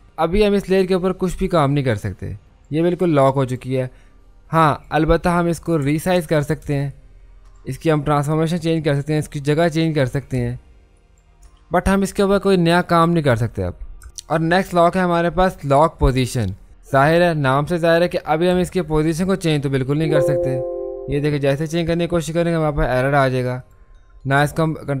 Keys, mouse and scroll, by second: 1.0-5.8 drag, 6.2 ctrl+t, 6.9 shift+click, 14.0 Return, 16.0 click, 18.5 v, 19.1-23.6 drag, 23.6 click.